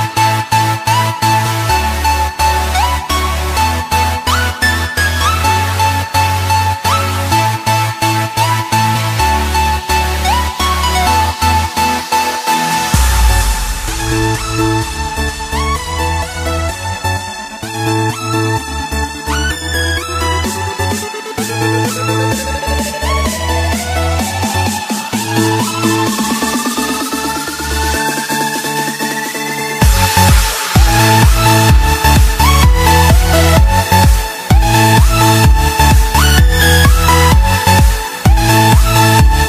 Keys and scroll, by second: 0.3 space, 5.1 ctrl+-, 6.6 ctrl+=, 7.4 space, 9.7 ctrl+z, 21.7 space.